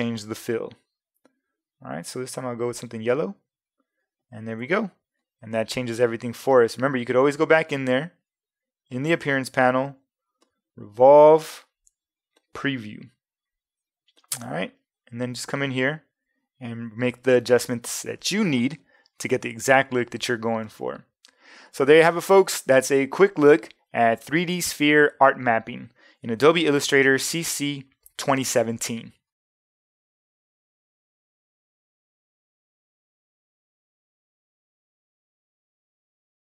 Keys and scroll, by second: 0.2 ,, 4.6 v.